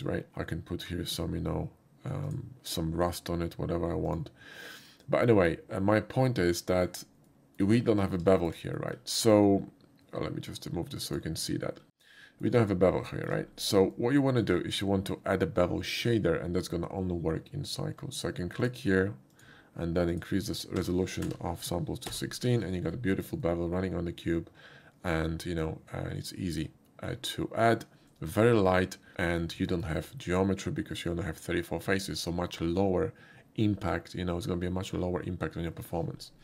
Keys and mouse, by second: 0.0 click, 1.1 click, 2.2 click, 4.1 click, 7.3 middle drag, 8.3 shift+middle drag, 8.8 shift+middle click, 11.1 shift+click, 12.1 middle click, 13.1 shift+middle click, 13.9 shift+middle click, 18.6 click, 19.3 click, 20.1 click, 21.1 1, 21.2 6, 22.1 Return, 22.1 1, 23.4-26.6 middle drag, 29.6 shift+middle click.